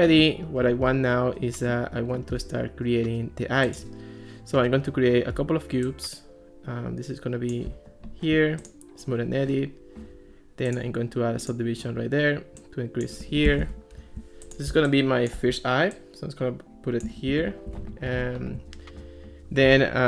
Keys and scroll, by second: 13.5 Escape, 17.3 alt+r.